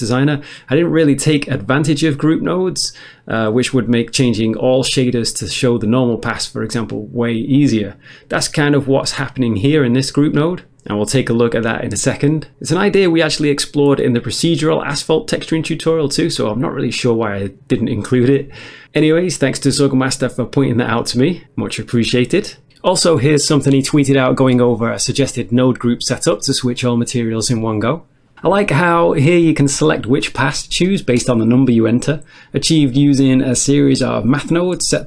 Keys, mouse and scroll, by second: 12.5 scroll down 1, 13.1 Tab, 13.4 scroll down 1, 13.5 middle click, 13.7 middle click, 14.1-14.6 scroll up 1, 14.9 click, 15.4 click, 15.5 Return, 15.5 typing, 15.8 click, 16.4 click, 16.9 typing, 17.4 middle click, 19.6 middle click, 20.3 middle click, 20.5 middle click, 20.7 click, 21.2 middle click, 21.6 middle click, 22.2 click.